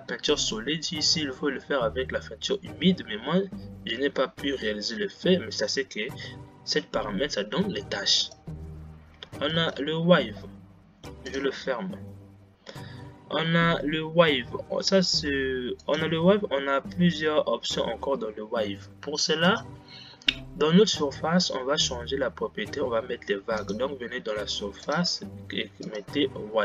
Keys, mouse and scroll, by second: 20.2 click.